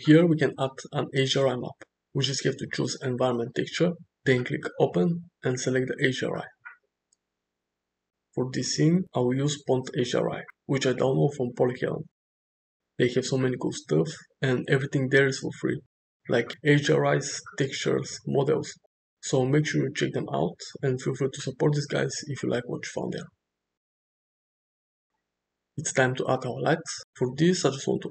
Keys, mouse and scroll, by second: 1.5-3.4 drag, 5.1 click, 14.8-23.3 middle drag, 24.2 KP_0, 27.1-28.1 drag.